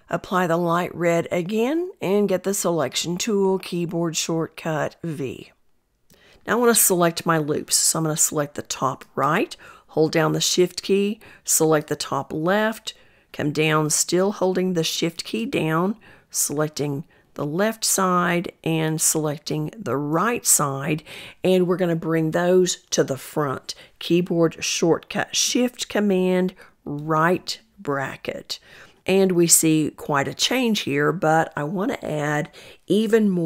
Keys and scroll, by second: 3.3 v, 24.1 shift+super+].